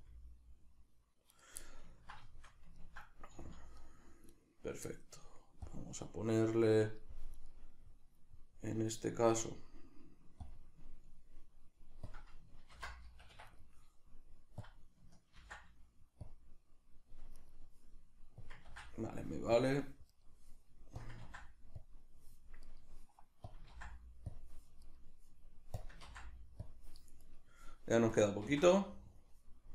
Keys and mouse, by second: 1.4 right click, 1.6-4.3 ctrl+middle drag, 3.3 z, 4.3-5.7 right drag, 7.3 right click, 10.4 click, 11.2 middle click, 12.1-13.5 drag, 13.2 Escape, 13.5 right click, 14.6-17.4 drag, 17.4 right click, 18.4-20.2 drag, 20.2 right click, 21.0-22.7 drag, 22.7 right drag, 24.8 right click, 25.8-27.2 drag, 27.2 right click.